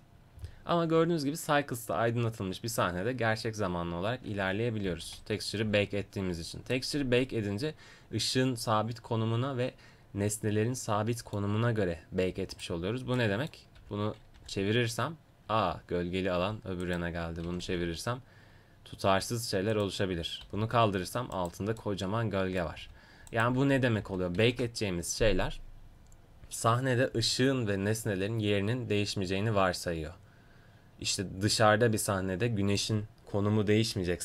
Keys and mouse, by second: 0.1 middle click, 0.9 middle click, 2.8 middle click, 12.6 right click, 13.2-14.9 middle drag, 13.8 r, 16.8-18.7 drag, 17.4 r, 18.7-19.7 middle drag, 19.7-21.3 drag, 20.4 g, 22.8 g, 24.1 ctrl+z, 24.4 ctrl+z, 27.3 middle click, 28.3-29.5 middle drag.